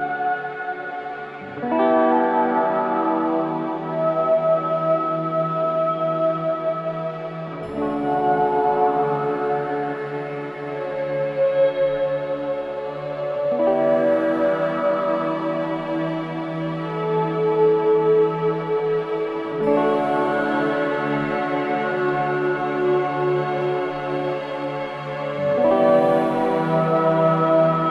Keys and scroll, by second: 3.0 ], 3.9 4, 4.5 2, 11.7 ], 21.9 ], 24.1 ], 24.7 ], 26.6 ctrl+z.